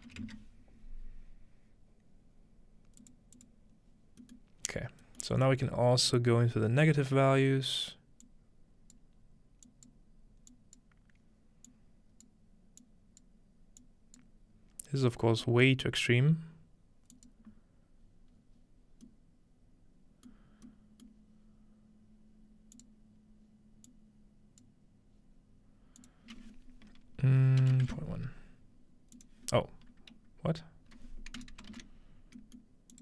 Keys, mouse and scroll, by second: 0.2 -, 0.3 click, 3.0-4.2 drag, 4.2-5.1 middle drag, 4.7-6.9 scroll up 2, 6.9-8.2 scroll up 1, 8.2-13.6 drag, 13.8 click, 15.1-16.9 scroll down 1, 15.4-17.0 middle drag, 17.2-18.3 drag, 18.3-20.3 scroll up 1, 19.1-22.8 middle drag, 22.8-26.1 drag, 29.2 click, 31.4 right click, 32.4 middle click, 32.9-33.0 drag.